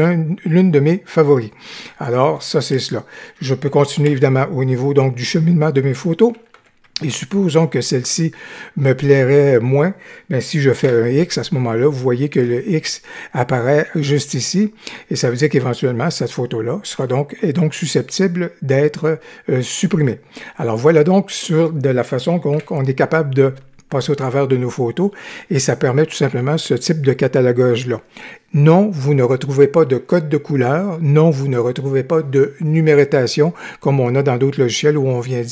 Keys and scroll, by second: 4.0 Right, 6.5 Right, 7.8 Right, 10.8 x, 22.5 g.